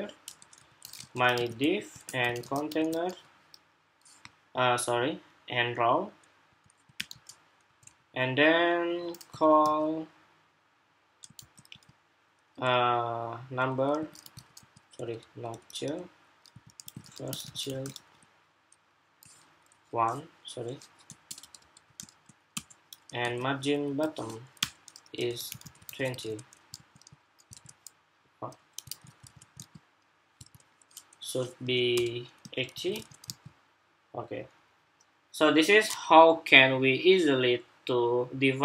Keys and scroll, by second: 25.6 super+s, 26.5 super+r, 27.2 super+Tab, 28.5 super+Tab, 28.7 super+s, 29.0 super+Tab, 29.4 super+r, 32.4 super+s, 32.8 super+Tab, 33.0 super+r.